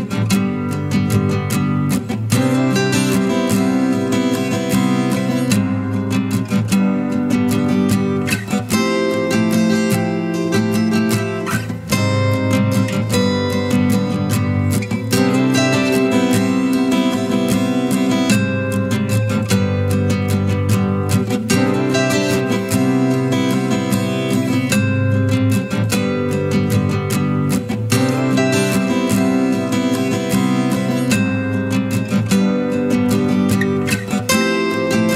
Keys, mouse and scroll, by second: 13.5-13.8 scroll down 1, 20.0 typing, 23.5-24.2 typing, 27.4 typing, 27.7 right click, 30.9 alt+click, 32.4 ctrl+t, 33.9 Return.